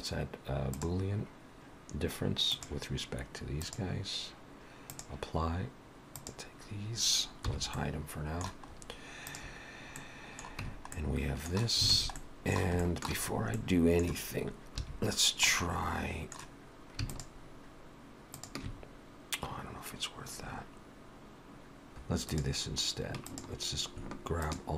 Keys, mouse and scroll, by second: 4.9 click, 6.2 click, 7.5 h, 7.8 middle click, 8.8-9.3 scroll up 2, 9.3 click, 10.0 middle click, 10.7 Tab, 11.0 middle click, 11.9 alt+a, 12.2 middle click, 12.8 shift+middle click, 13.3 scroll up 2, 13.6 middle click, 14.8 2, 15.5 middle click, 17.2 alt+shift+click, 18.5 alt+shift+click, 19.7 scroll down 1, 22.3 click, 22.3 3, 23.3 click, 24.5 shift+click.